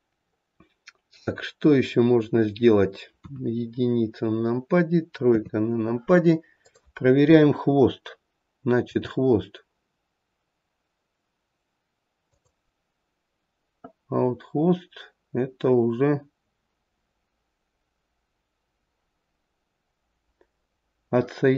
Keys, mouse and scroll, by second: 3.2 KP_1, 5.3 KP_3, 6.6 click, 8.8 g, 14.3-17.3 scroll up 1.